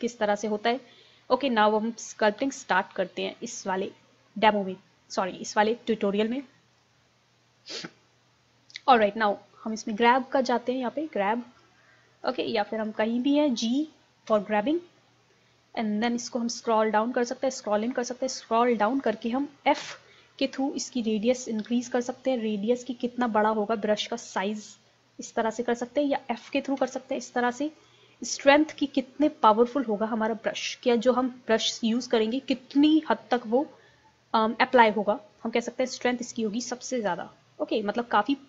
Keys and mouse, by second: 2.2-4.2 drag, 9.0-10.8 drag, 11.6-14.3 drag, 14.3 g, 19.4 middle click, 19.8 f, 25.1-27.0 drag, 26.8 f, 27.9-29.7 drag, 35.8-37.7 drag.